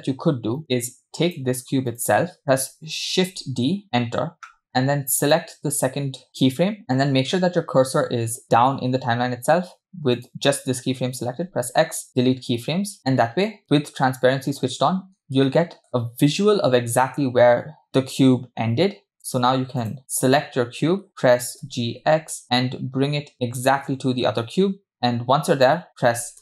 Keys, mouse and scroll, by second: 1.2 click, 1.9 click, 3.5 shift+d, 5.3 click, 10.2 click, 11.5 x, 15.0-16.4 scroll up 3, 15.5-15.9 shift+middle drag, 19.2 click, 19.9 click, 21.2 click, 22.0 g.